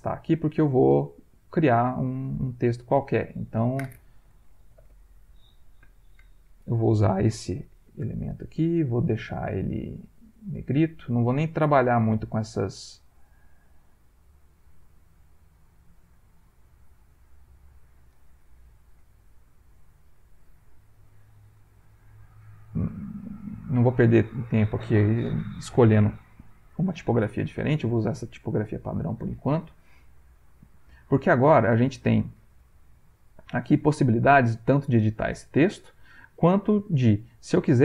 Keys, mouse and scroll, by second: 2.9 click, 4.3-5.4 typing, 9.2 click, 10.1 click, 12.4 click, 13.8 click, 14.7 click, 15.3 click, 17.4 click, 18.9 click, 20.4 click, 22.4 click, 23.2 ctrl+click, 26.8 Caps_Lock, 30.4-32.0 drag, 32.4 ctrl+click.